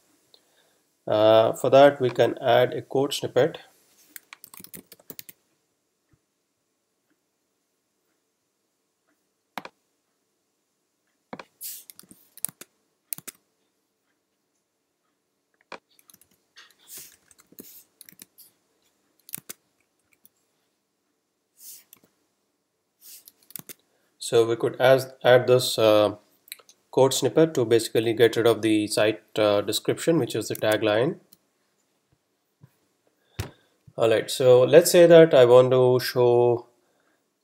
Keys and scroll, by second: 4.2-5.3 typing, 12.3 super+c, 16.4 super+Down, 17.4 super+Return, 18.1 super+s, 19.4 super+Tab, 20.0 super+Right, 22.0 r, 23.6 super+Tab, 30.8 super+Tab.